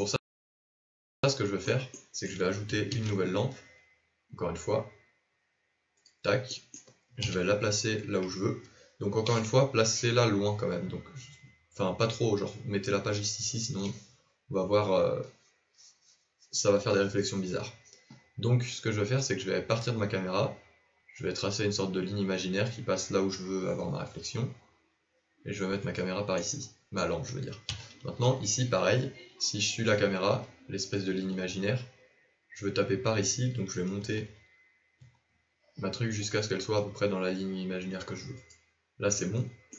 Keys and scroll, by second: 2.9 shift+a, 7.2 KP_7, 9.2 g, 27.6 KP_1, 33.8 g.